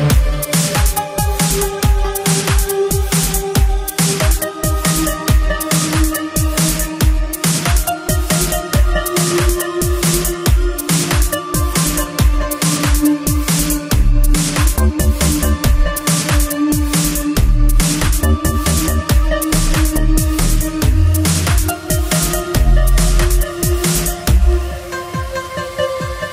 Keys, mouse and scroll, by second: 0.3 double click, 0.4 double click, 2.0 click, 8.5 click, 12.6 click, 14.7 click, 17.0 middle click, 17.2 shift+middle click, 21.0 click, 21.9 click, 22.6 click, 23.5-24.5 typing, 24.9 Return.